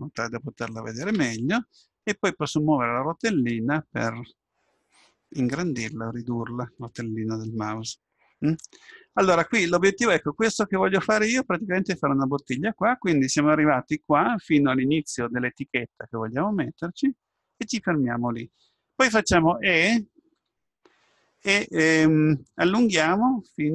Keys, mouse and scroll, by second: 2.3-4.1 scroll up 1, 4.1 middle click, 4.3-5.1 scroll down 1, 5.1-10.7 middle drag, 20.5 e.